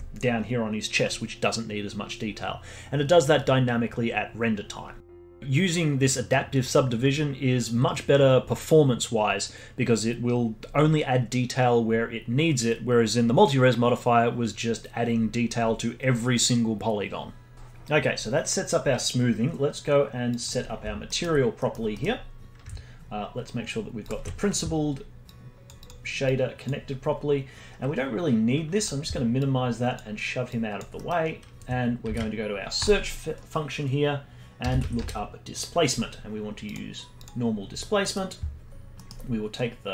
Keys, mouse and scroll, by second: 4.6-5.0 scroll down 4, 9.6-10.9 scroll up 1, 20.3 click, 21.0 alt+middle click, 21.6-24.0 middle drag, 24.0 ctrl+shift+click, 25.2 click, 28.8 drag, 29.4-30.5 drag, 30.9 middle click, 31.2-32.0 scroll up 3, 32.0 shift+a, 37.5-38.0 scroll up 1, 38.0 middle click, 38.4-38.9 scroll up 1, 38.9-39.9 middle drag.